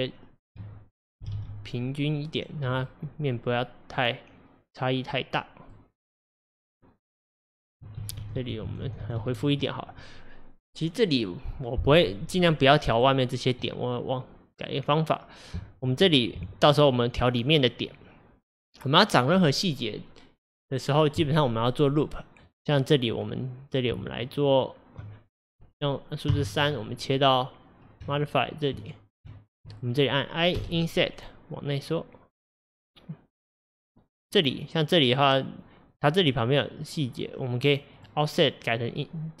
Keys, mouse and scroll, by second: 0.4 ctrl+click, 1.3 g, 2.9-5.9 middle drag, 8.0 ctrl+z, 8.2 ctrl+z, 8.4 ctrl+z, 8.7-9.2 ctrl+z, 12.5-16.7 middle drag, 24.0 Tab, 26.4 3, 26.7 click, 28.2 ctrl+click, 38.0 click.